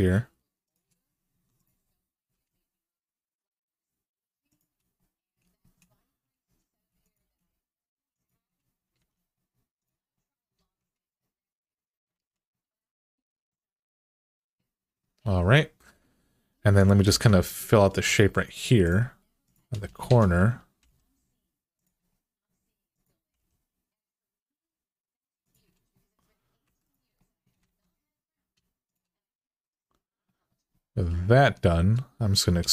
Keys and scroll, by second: 1.1-2.6 typing, 7.0 g, 8.7 alt+z, 10.4 alt+z, 11.9 alt+z, 16.9 ctrl+r, 19.8 alt+z, 20.6 g, 23.1 g, 26.4 2, 27.4 alt+z, 32.4 e.